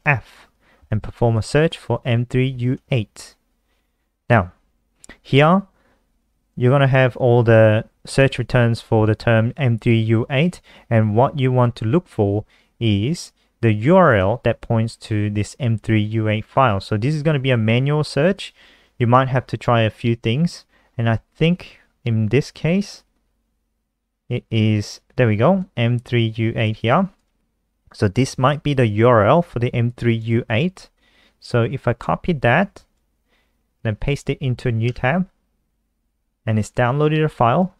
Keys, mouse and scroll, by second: 0.2 ctrl+f, 1.2-3.2 typing, 6.8 click, 33.4 ctrl+c, 34.0 ctrl+t, 34.4 ctrl+v, 35.1 Return.